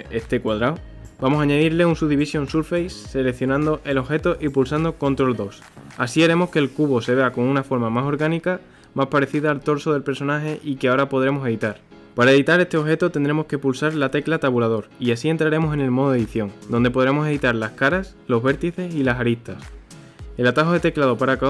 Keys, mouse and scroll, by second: 0.9 click, 5.7 ctrl+2, 14.5 scroll up 1, 14.8-15.8 middle drag, 15.8 KP_1, 16.7 Tab.